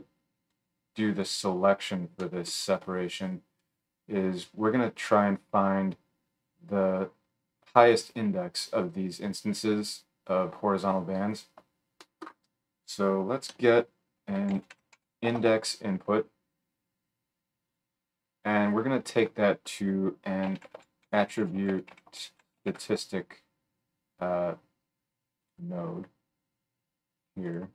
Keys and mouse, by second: 13.5 F3, 17.5 middle click, 17.7-18.7 right drag, 18.7-27.5 middle drag, 20.7 t, 27.5 right click.